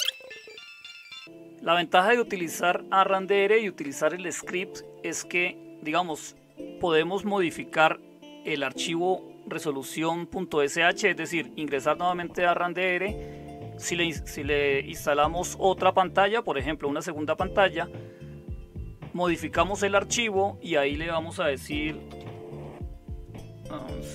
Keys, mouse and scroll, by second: 21.2-22.7 typing.